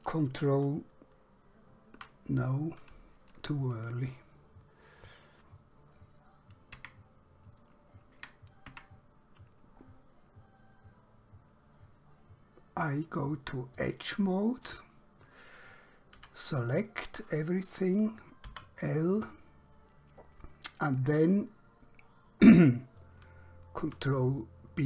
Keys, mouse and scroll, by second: 8.8 Tab, 9.9 scroll up 1, 13.8 click, 16.3 3, 16.5 click, 18.5 l, 23.2 ctrl+Num_Lock, 24.0 ctrl+b.